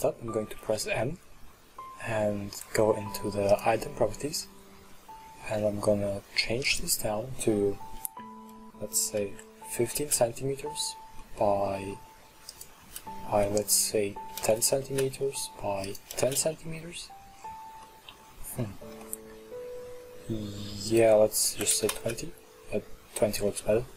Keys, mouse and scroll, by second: 0.6 n, 3.5 click, 6.7-9.8 drag, 11.2-12.5 middle drag, 12.5-15.6 drag, 15.9-17.1 drag, 17.1-17.9 scroll up 12, 17.9 middle click, 18.2-19.0 scroll up 5, 19.0-20.9 middle drag, 20.9-23.5 drag, 23.5-23.9 middle drag.